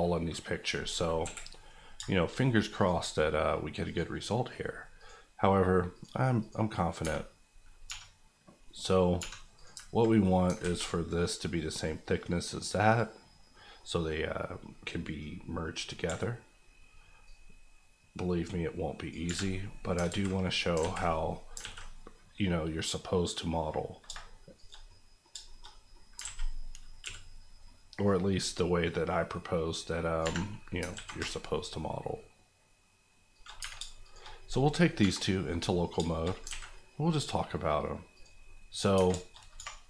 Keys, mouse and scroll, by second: 0.7 scroll up 1, 1.2 KP_1, 1.9 shift+KP_1, 2.1 shift+middle click, 2.3-2.8 shift+scroll up 1, 2.8 click, 3.0 middle click, 3.8 click, 4.2 middle click, 5.0 click, 7.0 Tab, 7.3-7.8 scroll up 1, 7.8 3, 8.6 middle click, 9.2 3, 9.5 click, 10.2 middle click, 10.6 alt+a, 12.1 middle click, 16.0 c, 16.6-17.0 scroll up 1, 17.2 click, 19.2 Escape, 19.5 middle click, 20.1 alt+z, 20.4 middle click, 20.8 alt+z, 21.0 middle click, 21.3 scroll up 2, 21.6 alt+s, 24.0 shift+s, 24.5 shift+click, 24.8 middle click, 25.1-25.7 scroll up 3, 25.4 shift+middle click, 25.9 middle click, 26.2 alt+a, 27.0 c, 27.2-28.0 scroll down 1, 28.0 click, 30.2 Escape, 30.4 middle click, 30.9 alt+s, 33.3 shift+click, 33.6 Tab, 34.0 shift+click, 35.0 KP_Divide, 35.7-36.4 scroll up 4, 36.0 shift+middle click, 36.4 alt+a, 36.7 middle click, 38.1 click, 38.4 middle click, 38.9 Tab, 39.1 shift+middle click, 39.3 shift+scroll up 2, 39.5 2.